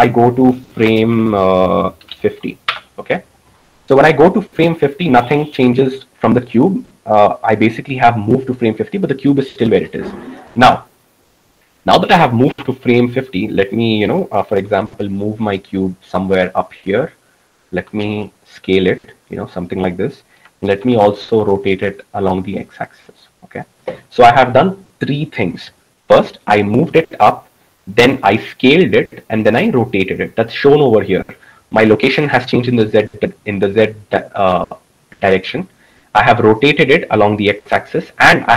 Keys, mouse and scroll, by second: 14.6 g, 18.6 s, 21.6 r.